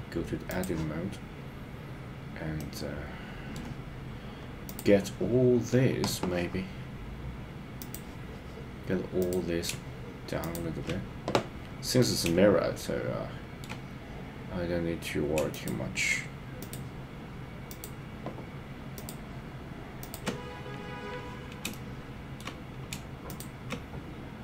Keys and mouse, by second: 2.6 middle click, 4.7 click, 7.8 click, 9.2 click, 10.4 shift+click, 12.1-13.7 middle drag, 16.6 shift+click, 17.7 shift+click, 19.0 shift+click, 20.0 shift+click, 21.7 shift+middle click.